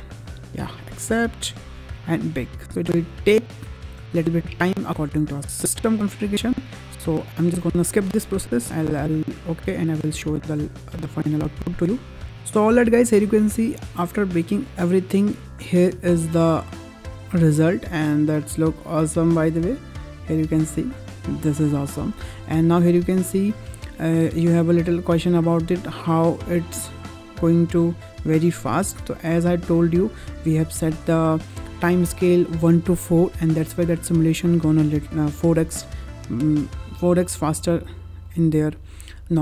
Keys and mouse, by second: 15.5 space, 21.9 space, 22.2 middle click, 23.6-30.1 drag.